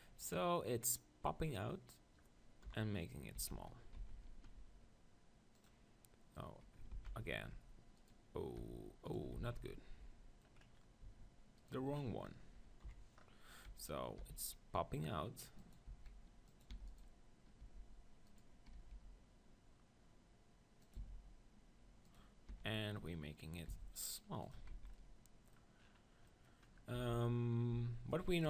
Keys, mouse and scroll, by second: 2.8 KP_7, 3.4 z, 3.7-5.6 middle drag, 4.0 z, 4.4 e, 5.7-7.5 drag, 6.9 ctrl+z, 7.5 g, 8.6 e, 9.4 ctrl+z, 11.6-13.6 middle drag, 12.9 KP_7, 14.2 e, 15.7-18.5 drag, 15.9 s, 16.7 e, 17.0-20.2 right drag, 17.6 g, 18.8 g, 21.0-24.0 drag, 21.0 s, 22.5 e, 23.8 s, 24.5-26.1 drag, 24.6 Tab, 24.7 z, 24.9-26.1 middle drag, 27.0 Tab, 27.7 z, 28.4 KP_1.